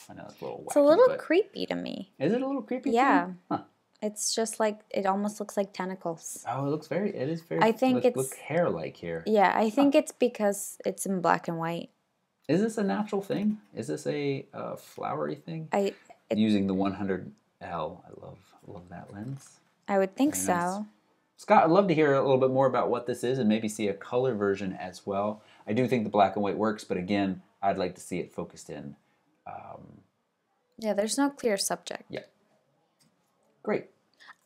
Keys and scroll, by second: 33.0 alt+super+Right.